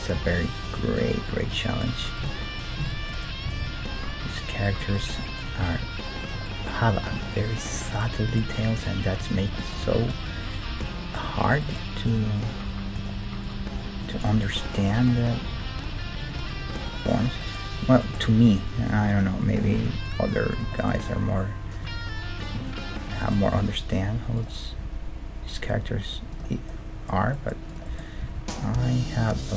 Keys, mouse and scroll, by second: 0.1 g, 1.1-4.4 right drag, 2.2 z, 2.8 z, 3.1-7.1 middle drag, 3.4 g, 5.6 g, 6.9 right click, 7.1 g, 9.8 g, 10.8 g, 12.7 g, 13.0 click, 13.0-16.5 middle drag, 13.6 g, 14.3-16.1 drag, 14.9 g, 15.5 g, 16.5 right click, 16.7 g, 17.4-19.9 drag, 18.8 g, 19.9 right click, 21.0 g, 22.3 click, 22.7 right click, 23.9 g, 24.8 click, 24.8 middle click, 24.8 r, 25.0 right click, 26.7-29.5 middle drag, 27.7-29.5 right drag, 28.3 g.